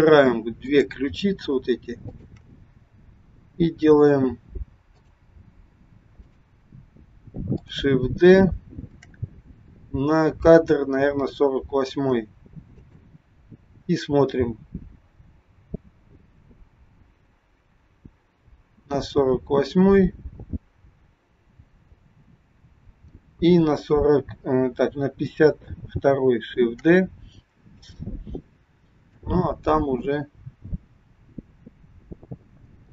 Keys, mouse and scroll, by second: 0.6 click, 2.0 shift+click, 2.4 shift+click, 6.3 click, 7.5 click, 9.0 shift+d, 14.4 click, 26.7 shift+d, 29.1 click.